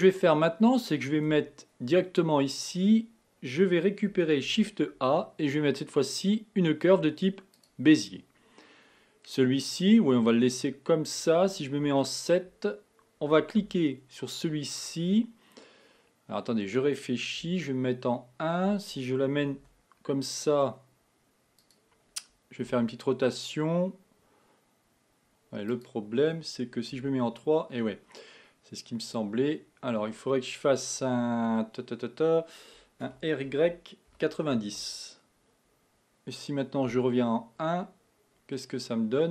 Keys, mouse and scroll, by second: 1.3 Tab, 4.5 shift+a, 12.0 KP_7, 13.7 Tab, 17.6 KP_1, 19.6 g, 22.8 r, 27.0 KP_3, 33.1 r, 37.0 KP_1, 38.6-39.3 middle drag.